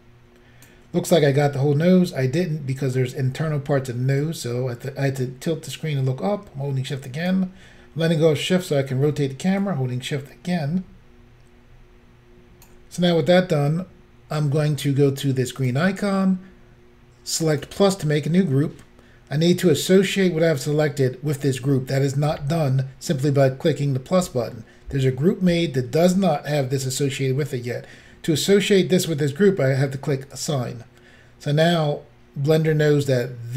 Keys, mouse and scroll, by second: 2.4 middle click, 4.2 shift+click, 8.2 middle click, 9.6 shift+click, 15.6 click, 15.7 click, 17.5 click, 30.4 click.